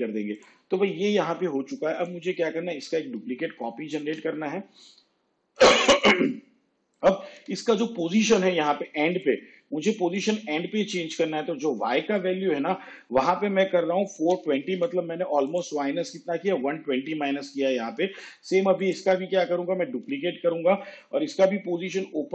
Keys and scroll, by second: 3.2 ctrl+d, 7.7 p, 14.3 4, 20.1 ctrl+d, 21.5 p.